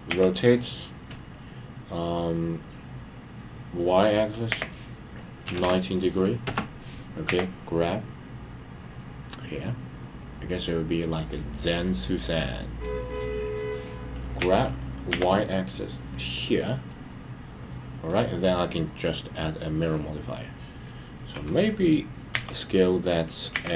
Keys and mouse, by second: 11.1 click, 11.8-12.9 middle drag, 16.3 click, 16.9-18.1 middle drag.